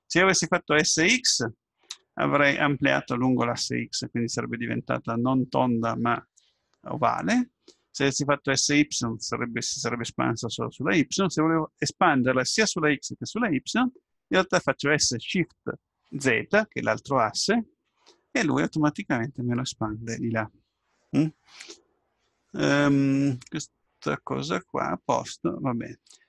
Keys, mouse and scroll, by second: 24.5-26.2 middle drag.